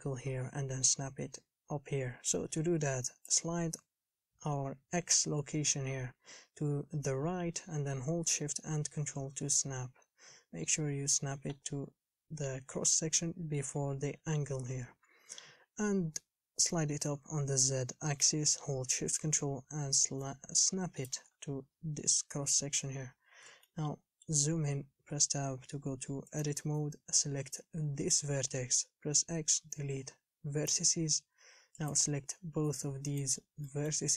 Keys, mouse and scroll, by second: 3.9-6.6 drag, 17.4-20.0 drag, 23.5 scroll up 3, 23.9-25.3 shift+middle drag, 25.3 Tab, 26.6 click, 30.9 x, 32.1 click, 33.4 shift+click, 33.9 shift+middle click.